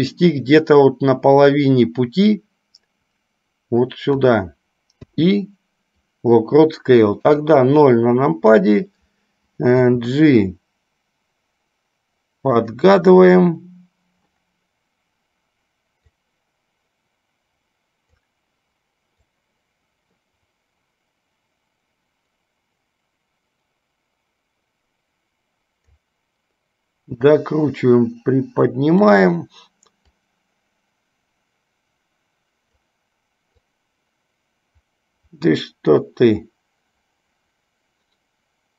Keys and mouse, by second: 16.3-18.5 drag, 19.7-26.4 drag, 27.5-29.4 drag, 30.3-33.2 drag, 34.2-38.7 drag.